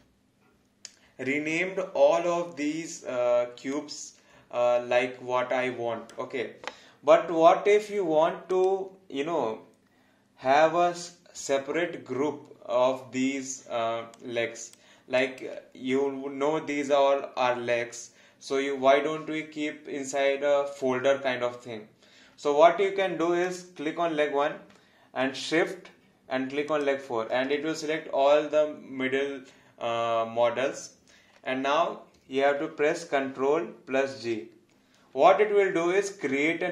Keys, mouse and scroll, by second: 3.8 alt+click, 8.5 click, 14.1 alt+click, 23.5 click, 26.7 shift+click, 34.1 ctrl+g.